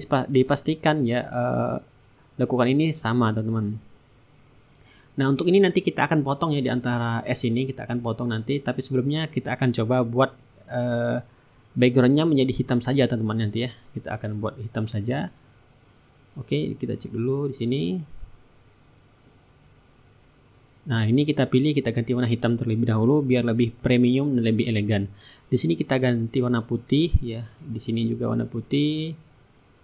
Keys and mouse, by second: 1.0 shift+right click, 2.5 middle click, 3.4 click, 4.9 click, 7.3 click, 9.5 click, 12.5-13.5 middle drag, 13.5 click, 14.9-18.9 drag, 17.2-18.9 right drag, 19.3-20.5 shift+right drag, 20.6 click, 21.8-25.0 drag, 23.1 middle click, 25.5 shift+click, 26.8 middle click, 27.3 click, 28.6 click, 29.5-29.8 middle drag.